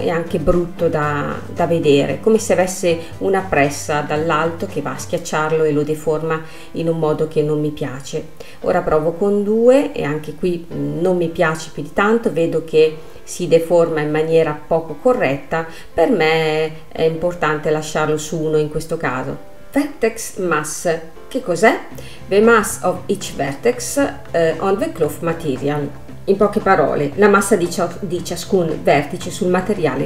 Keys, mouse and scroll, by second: 0.3 space, 5.1 click, 5.8-8.9 drag, 8.9-9.3 scroll down 2, 9.3 space, 10.6-12.9 middle drag, 12.9 space, 14.2-17.4 drag, 17.4 space, 19.0 space.